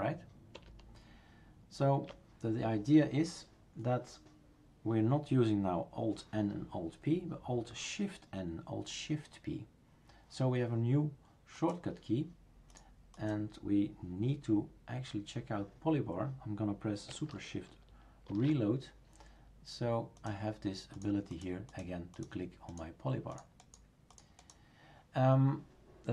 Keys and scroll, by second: 0.5 alt+p, 18.3 shift+super+r.